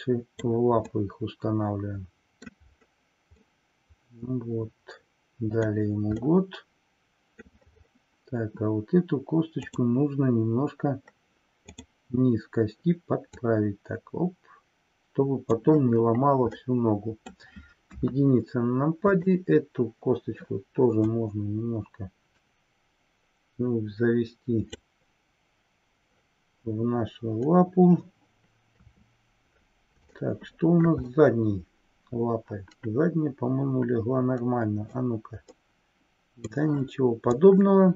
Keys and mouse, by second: 0.8-2.5 middle drag, 3.6-5.8 middle drag, 6.2-7.4 middle drag, 9.6-10.4 drag, 13.2 click, 16.5 middle click, 18.0 KP_1, 19.1 click, 21.1-24.8 drag, 28.7 KP_3, 30.2-30.8 middle drag, 31.2-35.1 middle drag, 35.5-36.7 middle drag, 37.4-37.9 drag.